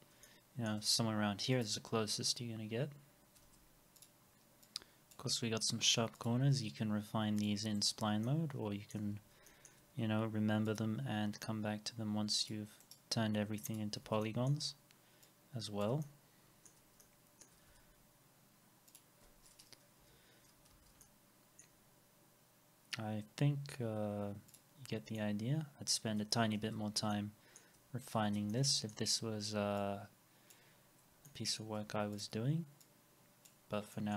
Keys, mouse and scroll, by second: 2.6 scroll up 1, 3.4 alt+x, 7.8 right click, 9.1 ctrl+z, 9.1 alt+middle click, 12.8 right click, 14.0 alt+x, 14.2 alt+middle click, 16.0 alt+middle click, 17.0 alt+middle click, 17.7 alt+x, 20.0 Delete, 20.7 alt+x, 21.0 alt+middle click, 24.9 scroll down 1, 25.2 alt+middle click, 26.4 alt+middle click, 26.4 scroll up 1, 26.6 alt+x, 27.1 alt+middle click, 28.4 alt+x, 28.5 alt+middle click, 30.8 scroll down 1, 31.3 alt+middle click, 33.7 scroll down 1, 33.9 middle click.